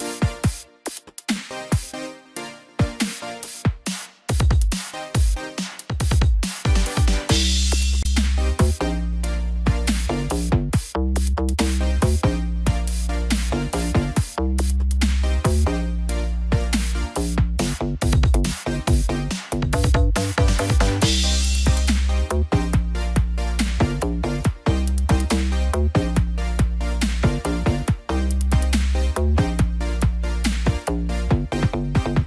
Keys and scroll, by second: 0.1 ctrl+z.